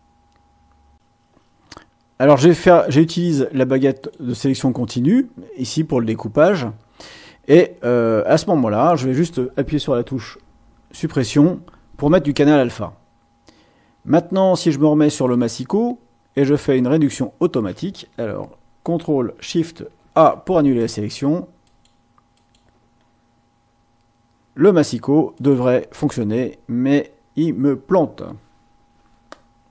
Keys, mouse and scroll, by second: 0.9 click, 4.0 click, 11.1 Delete, 15.2 click, 20.0 ctrl+shift+a, 21.6 click, 22.3 click, 25.3 click.